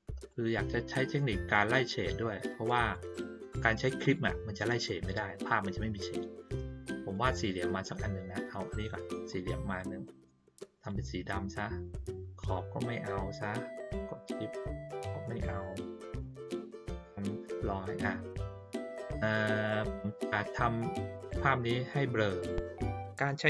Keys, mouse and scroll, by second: 0.2-2.9 drag, 4.0 click, 7.1-8.9 drag, 10.7 click, 15.4 shift+click, 20.0-21.1 ctrl+middle drag, 20.0-20.5 ctrl+scroll down 1, 20.5-21.1 ctrl+scroll up 1.